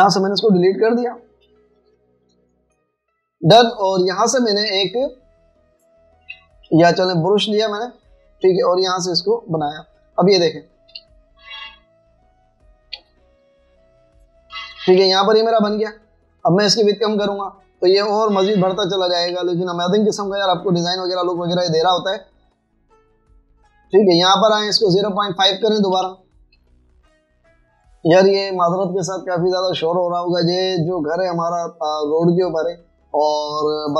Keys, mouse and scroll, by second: 0.6 Delete, 5.2 right click, 7.4 Escape, 8.0 v, 11.1 alt+scroll down 1, 11.5-12.5 typing, 13.8-14.5 typing, 16.1 typing, 18.1 scroll down 1, 18.3 scroll, 18.4 typing, 19.1 scroll down 1, 19.4 scroll, 19.4-21.0 typing, 21.2 alt+scroll up 1, 22.7 typing, 26.0 click, 26.0-27.6 typing.